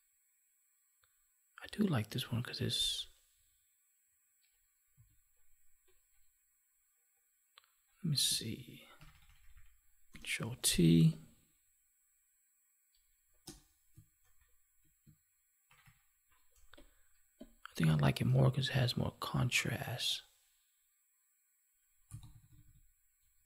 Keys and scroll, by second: 8.9 ctrl+-, 14.2 ctrl+1, 15.6 ctrl+-.